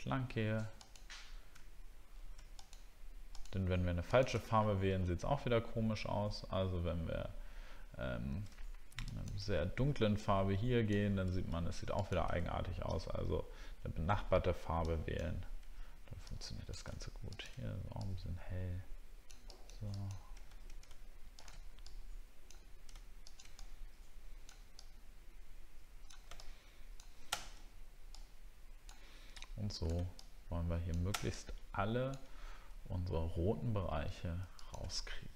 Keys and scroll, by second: 4.6 alt+scroll up 1, 5.5 alt+scroll down 1.